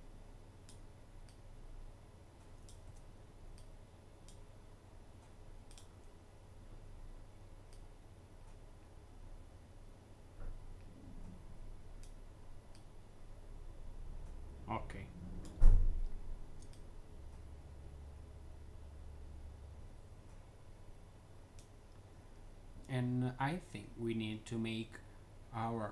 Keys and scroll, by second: 2.7 z.